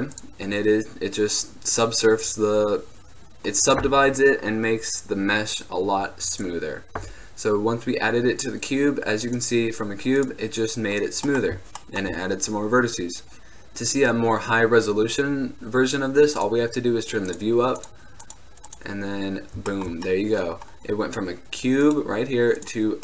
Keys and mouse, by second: 1.5-9.4 middle drag, 9.4 click, 11.4-13.3 middle drag, 19.8-20.7 middle drag, 22.0-23.0 drag.